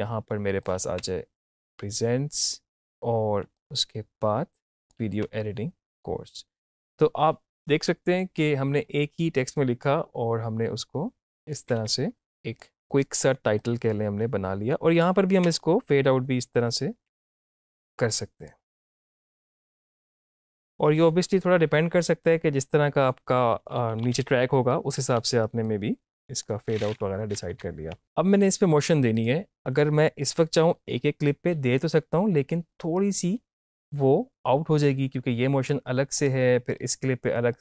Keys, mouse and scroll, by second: 1.0 space, 3.4 space, 3.6-5.2 drag, 5.2 space, 11.3 space, 12.2-15.5 drag, 15.5 space, 17.7-19.3 drag, 19.3 =, 19.5 click, 20.1 space, 20.4-22.8 drag, 23.6 Right, 24.4 click, 25.0 Right, 25.5 click, 27.5 -, 28.0 click, 33.0-37.6 drag.